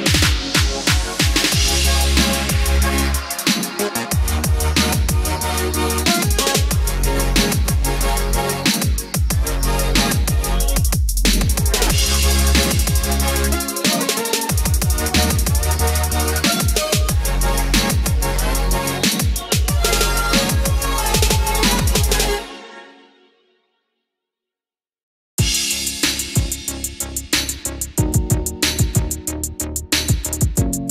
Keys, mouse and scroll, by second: 1.2 click, 4.4 middle click, 5.3 click, 5.9 ctrl+click, 11.4-13.7 middle drag, 13.9 click, 14.2 middle click, 15.8-22.8 ctrl+drag, 25.2 KP_1, 27.7 click, 28.6-29.9 middle drag.